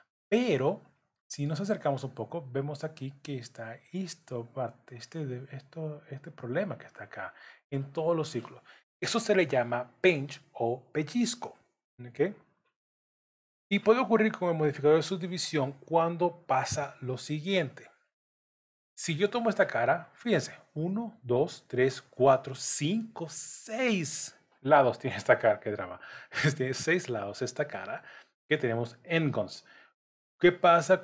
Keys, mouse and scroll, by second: 0.5 middle click, 1.5 scroll up 1, 16.5 Tab, 17.3 3, 18.2 click.